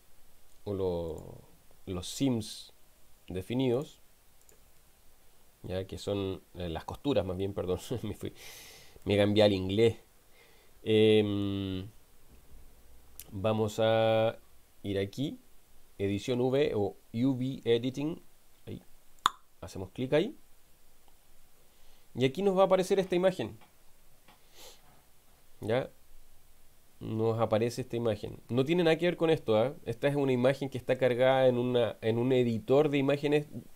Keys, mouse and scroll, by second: 1.1 click, 2.5 click, 3.7 click, 4.5 click, 4.8 Tab, 7.4-8.5 middle drag, 9.0-11.6 middle drag.